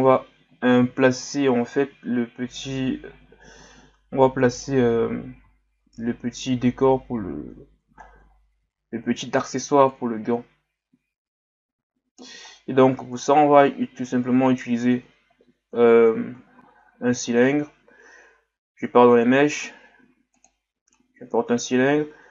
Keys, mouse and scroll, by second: 3.1-4.7 scroll up 2, 4.7-5.6 scroll down 2, 5.6-7.3 scroll up 4, 7.3-8.0 scroll up 1, 8.0 scroll down 2, 8.3 scroll up 2, 8.6 Tab, 9.9-12.5 drag, 12.5-13.2 scroll down 2, 13.2 Tab, 13.7-16.6 scroll down 1, 16.6 shift+a, 21.3-22.0 scroll up 1, 22.0-22.3 scroll up 1.